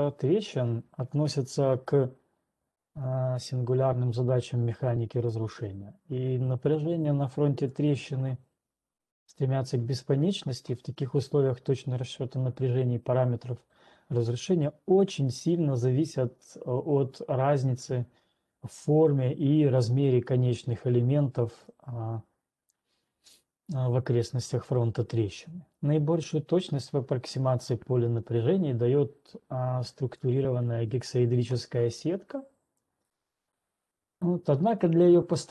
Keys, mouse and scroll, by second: 2.4 ctrl+2, 2.4 scroll, 6.4-6.9 scroll, 7.9 click, 23.0 click, 31.5 click, 33.5 click.